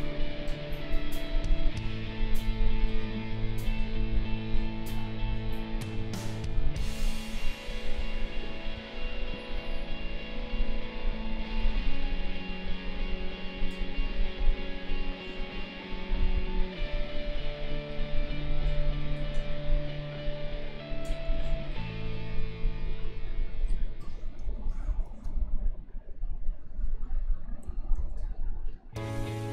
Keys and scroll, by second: 10.4 space, 24.4 space, 27.9 ctrl+z.